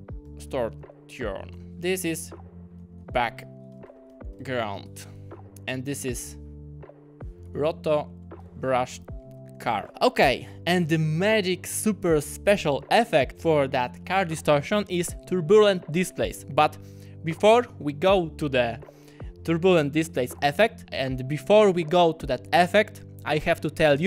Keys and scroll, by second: 0.2-1.7 typing, 2.7-4.8 typing, 7.2-9.3 typing.